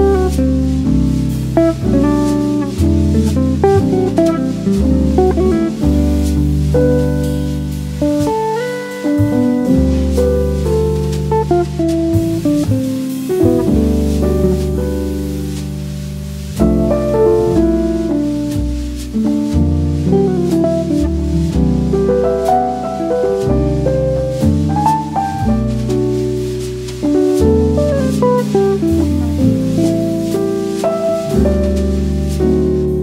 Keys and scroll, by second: 15.4 v, 15.8 n, 24.8 super+z, 30.7 Down.